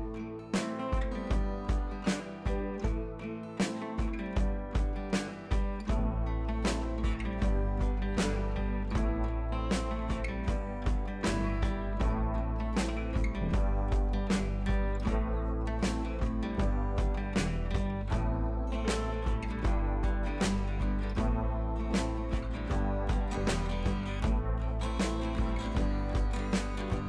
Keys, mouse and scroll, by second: 0.9 ctrl+d, 1.2 click, 2.4 ctrl+x, 2.9 ctrl+x, 3.3-3.8 scroll up 1, 3.8 scroll down 1, 5.8 click, 7.5 s, 8.4 click, 9.1 p, 9.4 click, 11.6 click, 14.2 ctrl+d, 14.6-15.7 scroll down 2, 15.7-22.4 drag, 17.6-18.8 drag, 22.6 ctrl+click, 23.0 ctrl+t, 23.6-24.1 alt+drag.